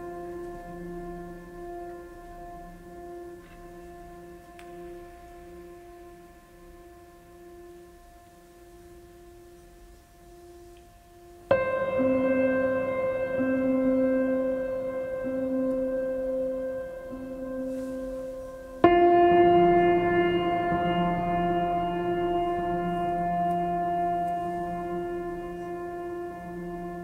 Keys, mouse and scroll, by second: 2.8 right click, 4.7 right click, 11.7 right click, 12.2 right click, 14.3 right click, 16.8 right click, 18.5 right click, 19.0 right click.